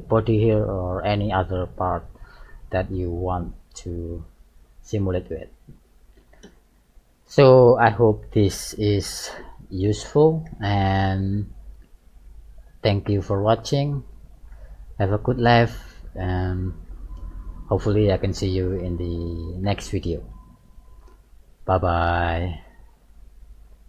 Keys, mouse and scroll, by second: 2.0 shift+middle click, 2.7 middle click, 4.0 shift+middle click, 5.0 middle click, 6.8 KP_1, 9.6 right click, 11.0 g.